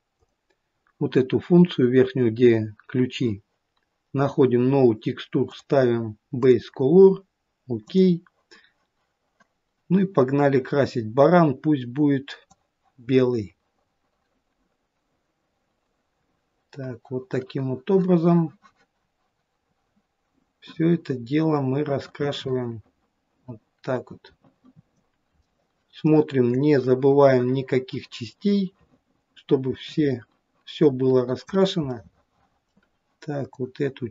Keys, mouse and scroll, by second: 0.2 click, 5.5 click, 12.6 click, 25.4 middle click, 26.6 middle click, 26.7 click, 32.0 middle click, 32.3 middle click, 33.6 click.